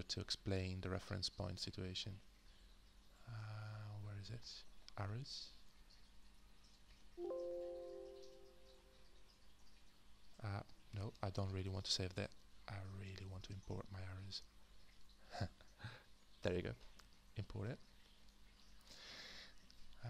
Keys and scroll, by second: 13.1-14.3 space.